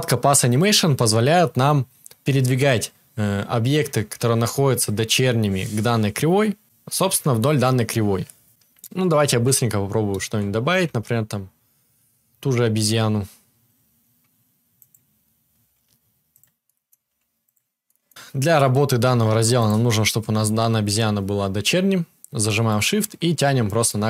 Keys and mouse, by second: 9.2 shift+a, 9.4-10.8 right drag, 10.3 Tab, 10.6 shift+a, 15.5 s, 16.9 s, 19.5 click, 19.6-22.6 right drag, 22.6-24.0 shift+drag.